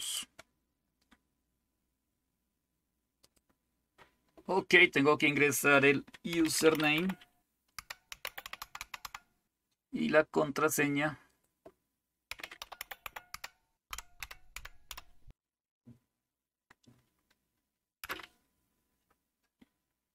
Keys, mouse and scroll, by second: 0.0 click, 3.2 click, 6.1-9.6 typing, 11.3 click, 12.1-15.4 typing, 18.1 Return.